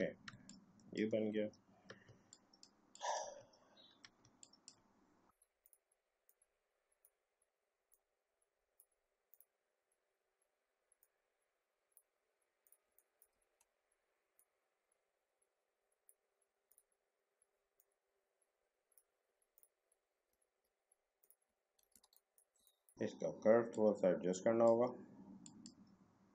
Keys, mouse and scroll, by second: 0.3 space, 0.4 click, 0.8 space, 1.4 alt+scroll up 1, 2.0 space, 2.3 click, 2.6 space, 2.9 click, 3.4-4.0 alt+scroll down 1, 4.2 space, 4.4 click, 4.7 space, 5.6-9.3 drag, 11.0-12.6 drag, 12.8 space, 13.0 click, 13.1 space, 13.4 alt+scroll down 1, 14.4-19.6 drag, 20.4 alt+scroll up 1, 21.2 click, 21.6 alt+scroll down 1, 21.9 a, 22.1 click, 22.6 space, 22.6 click, 22.8 space, 23.7-25.4 drag.